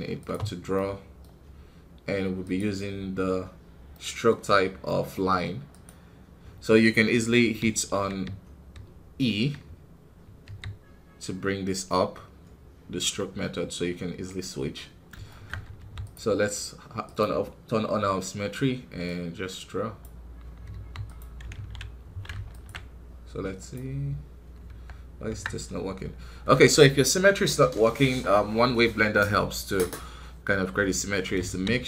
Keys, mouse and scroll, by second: 0.2 space, 15.2 shift+middle click, 15.7 f, 16.9-20.6 drag, 20.6 f, 21.5 ctrl+z, 22.6 ctrl+Tab, 24.6 Tab, 25.2 Tab.